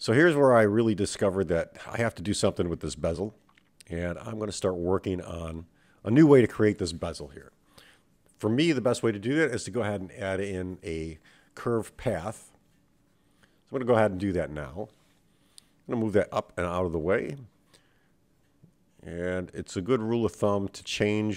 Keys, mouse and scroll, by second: 2.2-2.8 scroll down 3, 2.8-4.2 scroll up 3, 4.4 shift+a, 14.9-16.6 drag, 19.0 KP_7, 20.0-21.0 scroll up 3, 21.0 scroll down 1, 21.2-21.3 scroll down 1.